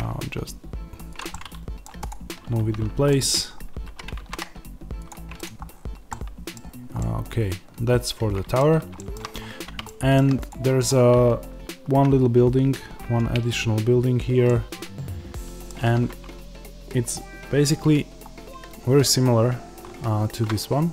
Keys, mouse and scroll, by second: 1.1 click, 1.2 middle click, 1.9-3.0 drag, 3.0-5.0 middle drag, 3.4-3.8 scroll up 1, 3.8 g, 5.0 click, 5.6 scroll down 1, 6.0-10.4 middle drag, 6.5-6.9 scroll down 1, 9.2-9.8 scroll up 1, 10.4 click, 14.4-20.9 shift+middle drag, 18.3-20.4 scroll down 1.